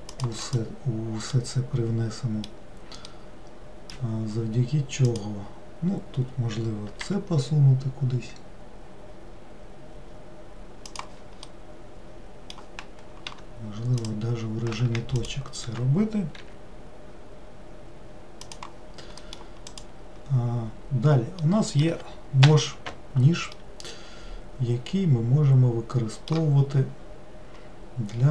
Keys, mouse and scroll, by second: 0.5 click, 1.4-5.2 middle drag, 5.2 click, 7.1 g, 11.5-13.4 middle drag, 13.4 1, 14.1 click, 15.3 shift+click, 16.5 g, 19.3-19.8 middle drag, 19.8 click, 21.5-22.5 middle drag, 22.5 k, 23.7-26.6 middle drag, 27.0-28.3 scroll up 1.